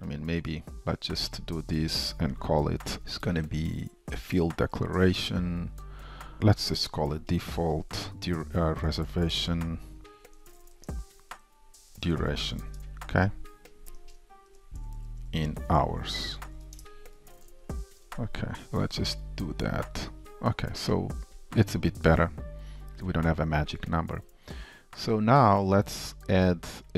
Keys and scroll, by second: 0.8 alt+super+f, 18.9 super+b.